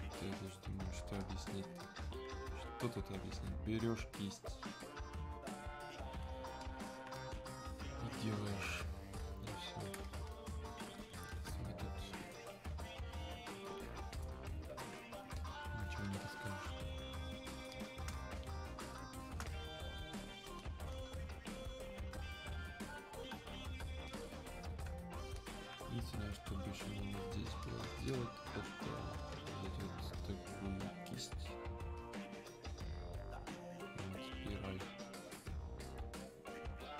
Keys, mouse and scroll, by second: 14.2 click, 18.2 space, 18.9 click, 19.2 space, 20.2 click.